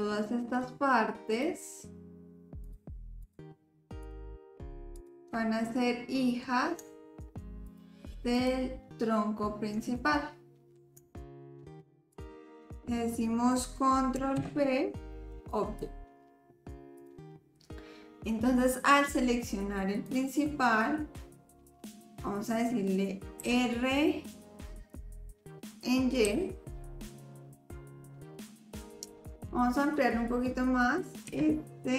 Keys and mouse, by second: 1.3 shift+click, 2.6 shift+click, 5.0 shift+click, 5.8-6.4 drag, 7.7 shift+click, 8.3 shift+click, 9.9-10.7 drag, 12.1 shift+click, 14.3 ctrl+p, 17.0 click, 20.1 click, 23.4 r, 31.2 s.